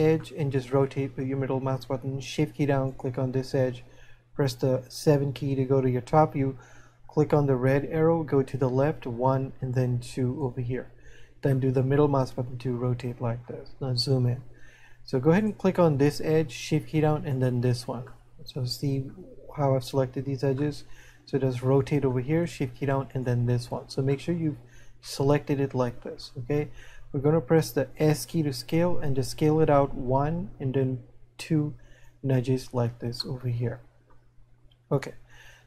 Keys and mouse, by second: 0.5 middle click, 8.9 click, 11.5 middle click, 18.3 middle click, 21.1 middle click, 24.6 middle click, 33.7 middle click.